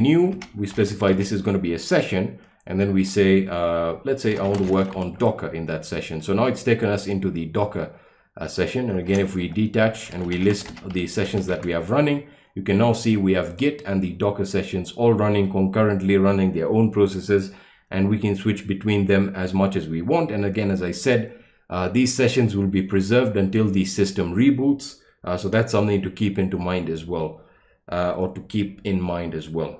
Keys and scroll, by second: 0.0-1.4 typing, 4.1-5.4 typing, 9.1 ctrl+b, 9.4-11.8 typing.